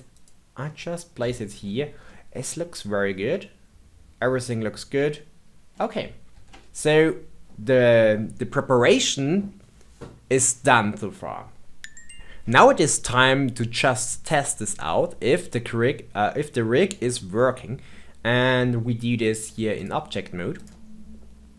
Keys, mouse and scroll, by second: 0.6-1.7 middle drag, 1.7-2.0 scroll down 2, 2.0-5.0 middle drag, 6.3 ctrl+z, 6.8-9.9 middle drag, 17.3-19.2 middle drag, 19.2-20.6 drag.